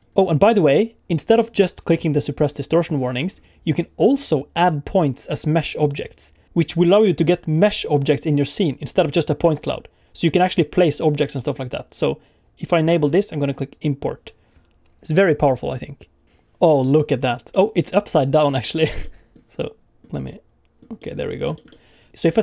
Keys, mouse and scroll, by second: 16.7 middle click, 17.5 middle click, 18.6 middle click, 19.0 middle click, 19.6 middle click, 20.2 middle click, 21.0 middle click, 21.2 scroll up 2, 21.5 shift+middle click, 21.7 middle click, 22.1 middle click.